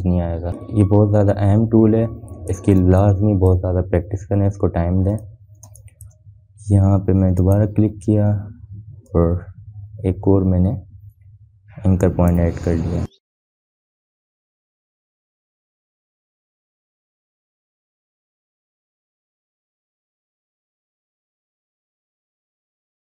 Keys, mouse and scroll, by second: 4.4 space, 4.6 click, 5.0 space, 6.7 click, 7.3 space, 7.4-23.0 drag, 17.5-18.8 drag.